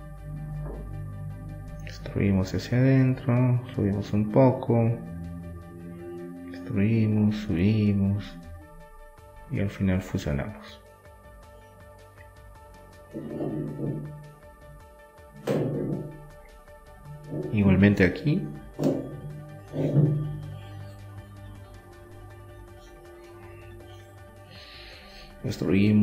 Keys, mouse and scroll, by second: 1.1 e, 2.1 s, 3.4 w, 5.4 middle click, 7.0 middle click, 7.4-9.8 drag, 8.1 right click, 8.7 Delete, 9.8 middle click, 10.1-11.8 drag, 11.8 middle click, 12.1-14.7 drag, 14.1 middle click, 14.7 e, 15.8 s, 17.1 e, 17.8 s, 19.3 w, 22.2-24.2 middle drag, 22.8 Tab, 24.2-26.0 drag.